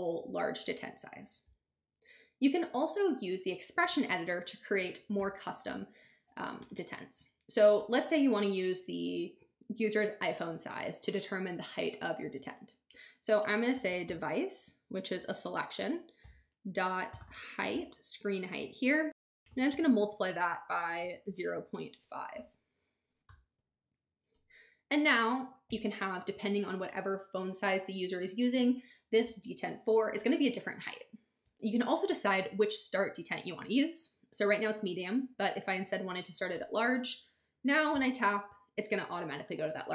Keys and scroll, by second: 13.5-14.6 typing, 15.1 Return, 16.9-17.7 typing, 19.1-22.0 typing, 23.3 Return.